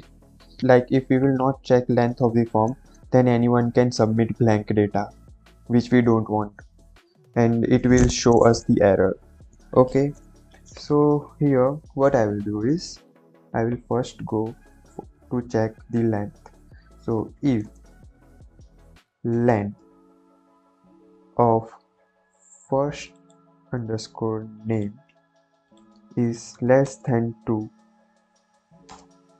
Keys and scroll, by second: 17.1 i, 17.3 f, 17.5 space, 19.1-20.4 typing, 20.7 Left, 23.7 ctrl+c, 25.2 ctrl+v, 25.8 space, 26.4 shift+,, 26.8 space, 27.0 2, 28.8 space.